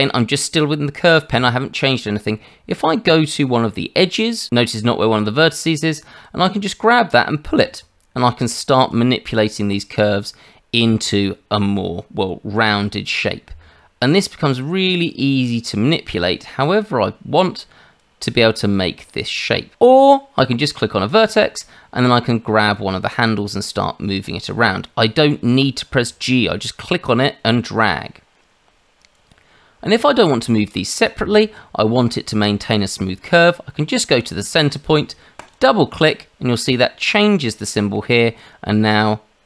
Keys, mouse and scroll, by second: 6.2 click, 8.9 click, 15.1 click, 18.0 click, 19.7 click, 21.1 click, 29.1 click, 35.4 click, 35.5 click, 38.4 click.